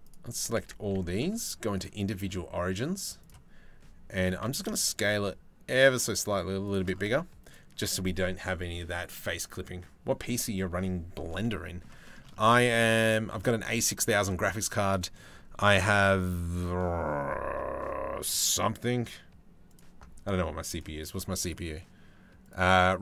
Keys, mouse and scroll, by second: 0.2 Tab, 0.5 a, 1.3 click, 1.7-2.9 drag, 3.8 s, 6.7 Tab, 7.1 click, 11.0 middle click, 11.6-13.0 shift+middle drag, 13.5 shift+middle click.